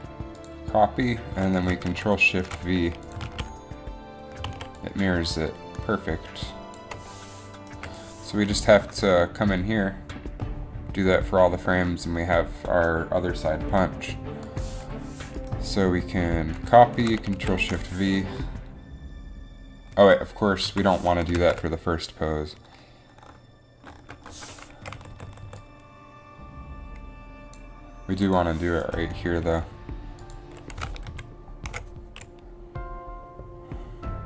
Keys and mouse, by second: 2.2 ctrl+shift+v, 3.4 alt+a, 4.6 alt+a, 8.0 Delete, 9.2 Delete, 12.6 Delete, 17.6 ctrl+shift+v, 20.1 Right, 20.8 Left, 23.4 ctrl+z, 25.0-25.3 Right, 25.5 Right, 25.6 Right, 31.0 Right, 31.3 ctrl+shift+v.